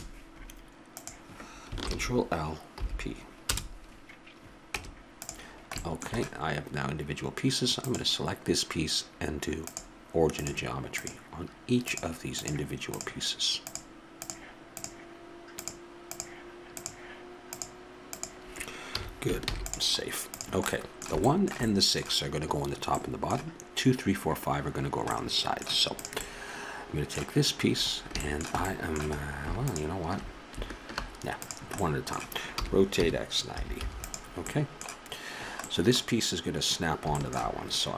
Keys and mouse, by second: 0.9 click, 1.8 ctrl+l, 2.7 p, 4.7 Tab, 7.8-9.6 drag, 9.6-12.4 drag, 18.9 a, 19.4 ctrl+s, 20.7-22.3 drag, 26.0-28.7 right drag, 29.7-31.3 right drag, 31.3-33.3 drag, 32.5 r.